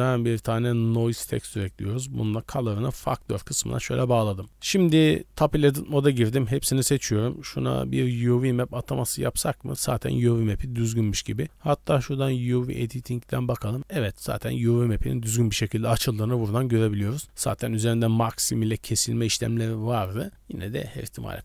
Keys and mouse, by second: 3.0-4.5 drag, 5.3 Tab, 6.3 a, 8.6 Tab, 9.0-9.7 drag.